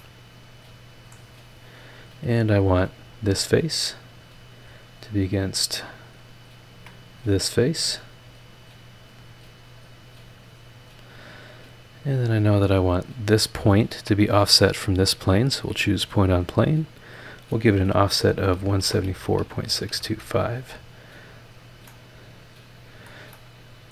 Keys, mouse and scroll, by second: 0.0-1.1 right drag, 1.1 scroll down 1, 1.3-2.3 scroll up 3, 3.0 click, 3.3-3.6 scroll down 2, 4.1-4.4 scroll up 2, 5.1 ctrl+click, 6.0 ctrl+click, 6.5 ctrl+click, 8.0 click, 8.9-9.4 scroll down 1, 10.5 click, 13.1 click, 13.9 ctrl+click, 15.5 click, 17.0 click, 18.5-20.1 typing, 21.5 click, 21.9 click, 22.7 scroll down 1, 23.1 scroll up 2, 23.3 click.